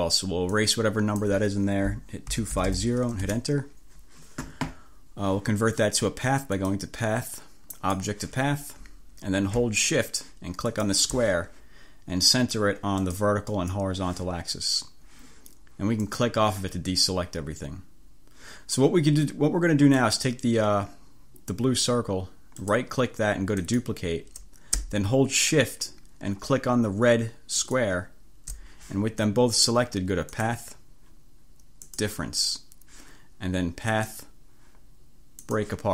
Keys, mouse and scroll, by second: 0.7 click, 2.2-3.3 typing, 6.6 click, 7.8 click, 10.8 shift+click, 13.1 click, 13.6 click, 16.2 click, 20.0 click, 22.8 click, 23.7 click, 27.7 shift+click, 30.4 click.